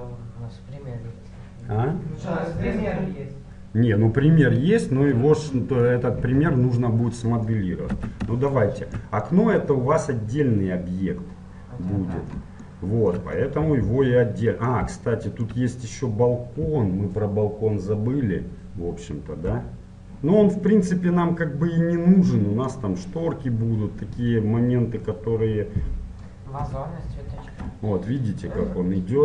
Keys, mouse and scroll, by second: 5.9-7.8 middle drag, 8.0 Tab, 8.6-11.2 middle drag, 12.7-17.0 middle drag, 20.9-22.7 middle drag, 26.7 KP_7, 27.4-29.2 middle drag, 27.4-29.2 scroll down 1.